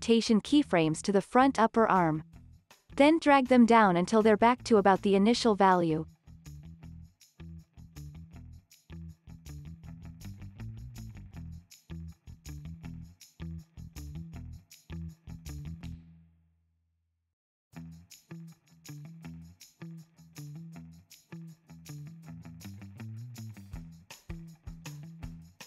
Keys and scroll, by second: 0.3 super+v, 5.1 super+c, 6.8 super+v.